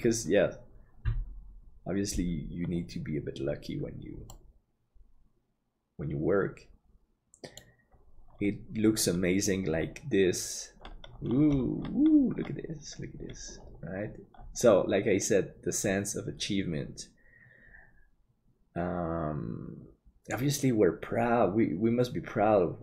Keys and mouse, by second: 4.3-8.1 middle drag, 13.2 middle click, 14.4-19.4 middle drag.